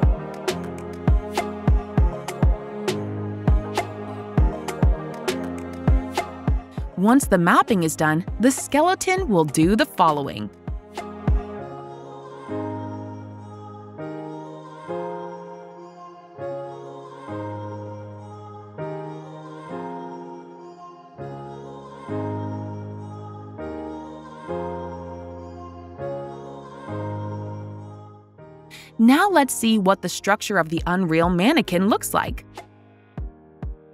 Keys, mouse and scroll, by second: 6.3 click, 8.7 click, 10.5 click, 11.3 click, 14.0 click, 15.8 click, 16.7 click, 17.6 shift+click, 19.7 click, 20.0 click, 21.3 right click, 23.3 click, 25.0 click, 27.0 click, 29.4 click, 31.1 click, 32.3-33.0 typing, 32.3 click, 32.5 click, 32.5 right click, 33.3 click.